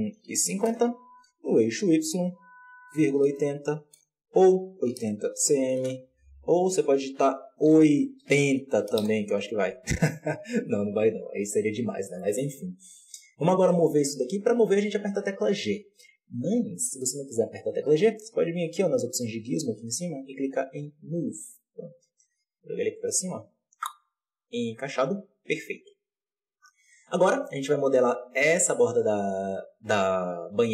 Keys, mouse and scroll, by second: 3.8 KP_Decimal, 4.3-8.9 drag, 8.9 KP_3, 11.4-12.1 scroll up 4, 12.1-14.7 shift+middle drag, 14.7 g, 19.2-30.7 drag.